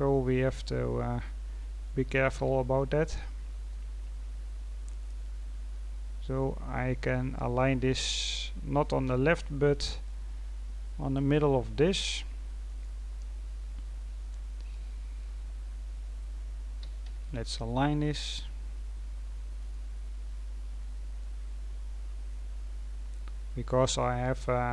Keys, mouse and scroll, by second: 0.2-2.3 scroll up 3, 2.3 g, 4.0-4.5 scroll up 4, 4.5-5.3 scroll down 6, 5.7-6.1 scroll down 4, 6.1-6.8 scroll up 6, 6.8-8.5 scroll down 2, 9.0 g, 13.0-14.2 scroll down 2, 14.2-15.5 drag, 15.5-16.7 scroll up 3, 16.7 g, 20.0-20.7 scroll down 2, 20.7 click, 22.8-24.7 scroll up 4.